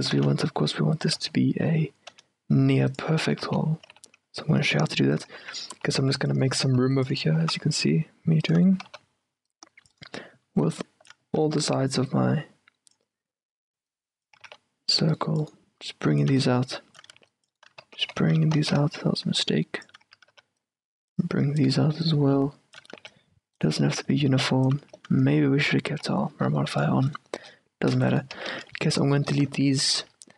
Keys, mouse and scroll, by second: 0.2 s, 1.3 z, 1.8 z, 3.6 z, 3.9 s, 5.5 a, 5.9 c, 6.9 c, 8.7 s, 8.9 a, 9.0 c, 11.0-18.8 drag, 14.5 a, 14.6 c, 17.2 a, 17.6 c, 18.0 ctrl+z, 18.2 ctrl+z, 18.8 ctrl+z, 19.4-26.0 drag, 20.2 a, 20.4 c, 23.0 a, 23.1 c, 24.9 a, 26.0 c, 28.3-30.3 middle drag, 28.5 z, 30.1 o.